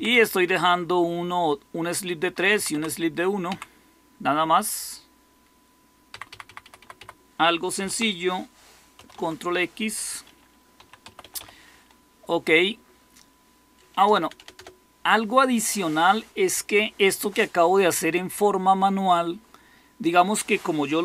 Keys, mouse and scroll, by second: 0.0 Down, 2.5 Down, 2.6 Down, 3.4 Down, 6.0 Up, 6.2 Up, 6.4 Up, 6.6 Up, 6.7 Up, 7.7 typing, 8.9 ctrl+x, 10.4-11.8 typing, 14.0-14.3 typing.